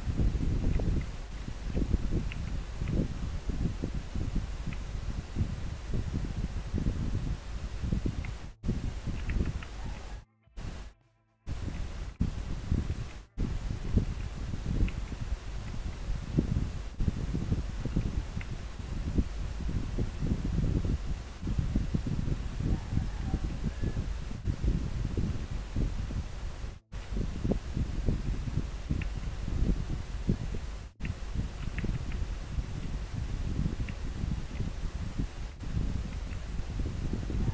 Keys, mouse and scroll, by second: 10.0 scroll down 1, 13.4 scroll up 1, 15.7 scroll up 1, 34.6 scroll down 1, 35.6 scroll up 1.